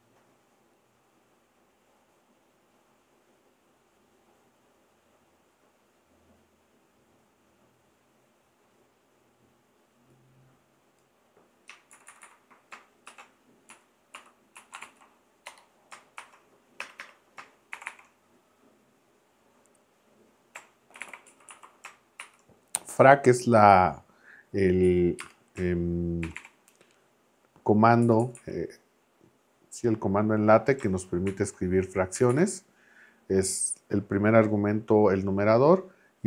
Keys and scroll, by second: 11.9 shift+Left, 13.1 shift+a, 13.7 Down, 14.1 Up, 14.5 Down, 14.8 super+Right, 15.5 BackSpace, 16.2 shift+;, 16.8 Return, 17.7 shift+4, 20.3-22.2 typing, 24.8 Right, 25.2 space, 26.2 shift+4, 28.0 Left, 31.3 shift+[, 32.2 Left.